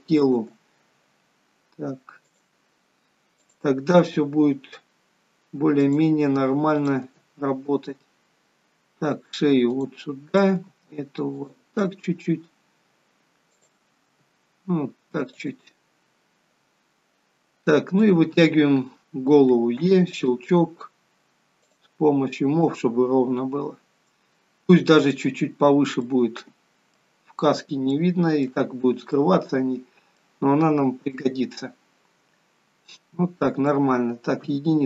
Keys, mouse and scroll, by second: 0.5 click, 0.6 g, 3.6 click, 4.2 g, 7.0 click, 7.2 g, 10.5 click, 10.7 g, 13.8 click, 14.3 g, 18.2 click, 20.0 e, 21.9 click, 22.9 click, 26.2 middle click, 27.5-27.9 scroll down 2, 28.1 shift+middle click, 28.9 scroll up 3, 29.3 middle click, 30.9 scroll up 1, 31.3 middle click, 34.7 KP_1.